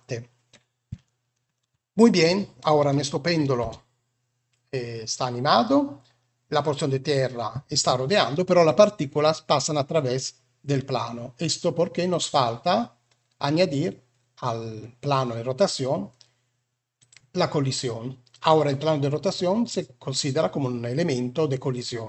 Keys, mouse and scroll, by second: 1.0 shift+middle click, 3.5 space, 9.1-10.7 middle drag, 12.0 click, 16.9 click.